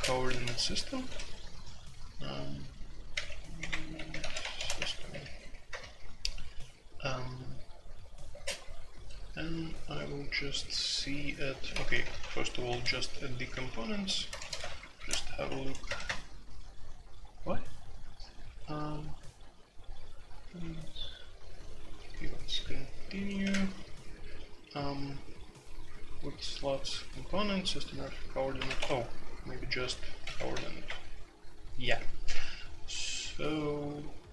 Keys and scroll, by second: 0.0-1.0 typing, 3.1-6.2 typing, 8.3 space, 11.7-15.8 typing, 16.0 Return, 23.4 2, 28.5 alt+p, 28.8 Escape, 28.8-30.5 typing, 30.8 Return.